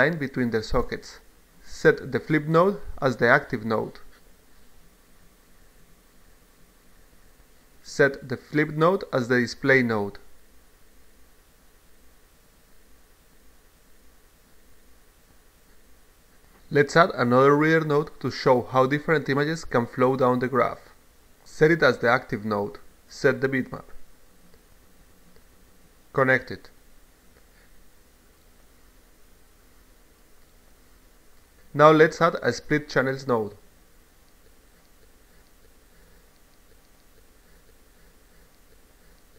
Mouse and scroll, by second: 1.9 click, 2.9 click, 5.3 click, 5.8 click, 6.2 click, 8.9 click, 9.9 click, 11.6 click, 12.3 click, 13.5 click, 14.4 click, 15.6-16.6 drag, 17.7 click, 18.0 click, 18.6-20.0 drag, 20.4 click, 22.0 click, 24.6 click, 26.6-27.6 drag, 29.0-30.2 drag, 30.8 click, 32.6 click, 33.3-34.8 drag, 36.3-37.2 drag, 37.6 click.